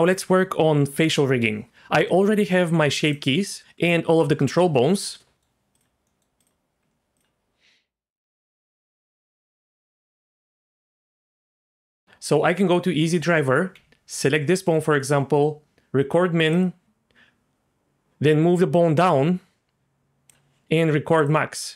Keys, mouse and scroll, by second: 2.7 Tab, 3.1 click, 5.3 middle click, 5.7 click, 6.0 middle click, 6.4 click, 6.8 Tab, 7.1-8.6 drag, 11.4 click, 13.7 g, 14.7-16.5 right drag, 16.5 click, 16.8-20.3 drag, 21.2 click.